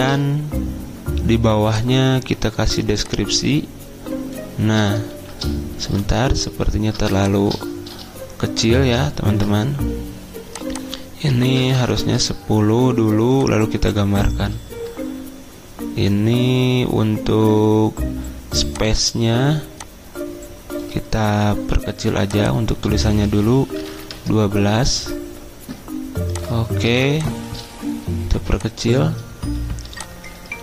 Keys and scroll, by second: 0.0-0.4 typing, 6.2 ctrl+z, 9.3 ctrl+t, 11.3-12.2 typing, 23.5-24.4 typing, 27.0 ctrl+x.